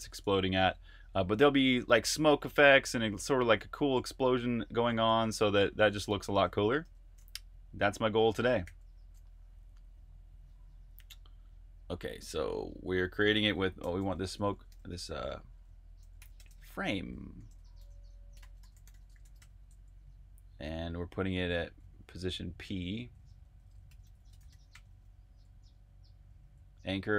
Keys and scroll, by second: 0.0-8.6 typing, 6.7 super+q, 13.4-15.0 typing, 16.2 typing, 18.0-19.7 typing, 21.1-22.5 typing, 24.2-25.2 typing.